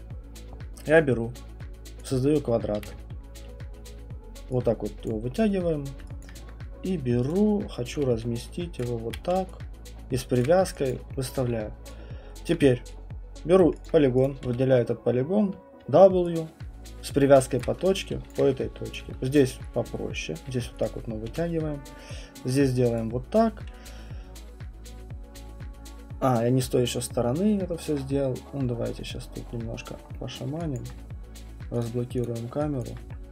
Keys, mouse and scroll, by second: 2.0 click, 2.3 middle click, 2.4 middle click, 2.8 w, 5.1 click, 5.3 middle click, 6.0 middle click, 6.2 alt+click, 6.3 click, 6.4 alt+click, 7.3 click, 7.7-11.4 typing, 8.8 click, 10.4 click, 10.9 alt+click, 11.3 alt+middle click, 12.5 alt+click, 13.6 right click, 13.9 alt+click, 14.2 click, 14.4 w, 16.0-19.0 typing, 17.6 click, 18.3 alt+click, 19.0 click, 20.2 click, 20.5 q, 20.8 click, 21.3 w, 23.0 click, 30.3 alt+middle click, 30.7 alt+click, 31.8 click, 32.2 click, 32.8 alt+click.